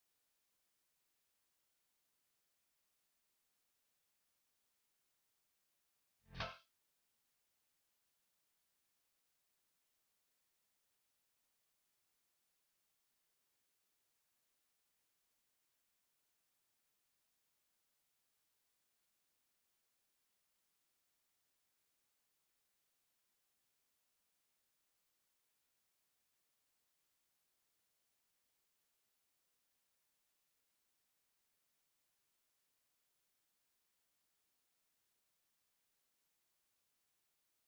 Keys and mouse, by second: 0.1 space, 0.2 click, 0.3 space, 0.9 ctrl+alt+click, 1.6 space, 1.8 click, 2.1 space, 3.6-10.6 drag, 12.4 ctrl+space, 12.6 ctrl+alt+click, 13.0 ctrl+space, 13.2 click, 13.5 space, 13.7 ctrl+click, 14.2 space, 14.4 click, 14.6 space, 17.2 click, 19.0 ctrl+alt+z, 19.6 ctrl+space, 19.8 ctrl+click, 23.2 ctrl+space, 23.5 ctrl+click, 23.8 space, 24.3 ctrl+click, 24.6 space, 24.7 click, 25.1 space, 26.5-33.4 drag, 33.4-36.2 drag, 36.2 space, 36.4 click, 36.6 space, 37.5-37.6 drag.